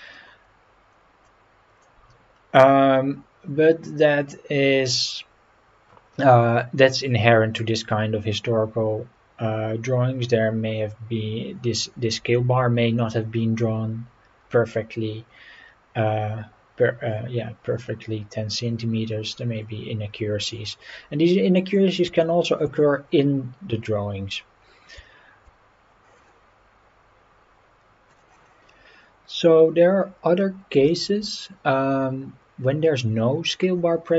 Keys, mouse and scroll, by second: 1.2 click, 2.1-3.1 scroll down 3, 3.5 scroll down 2, 4.3 scroll down 2, 11.9-12.5 scroll up 3, 19.4 scroll down 4, 22.2-22.6 shift+middle drag, 24.6 scroll down 1.